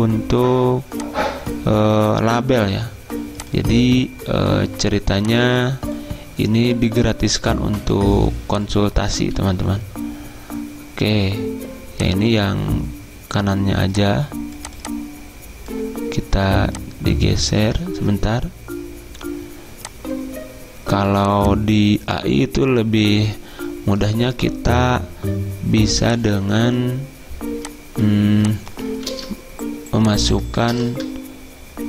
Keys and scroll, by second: 9.5 ctrl+z, 18.0 ctrl+z, 29.2 ctrl+c, 30.8 ctrl+v, 31.0 Return.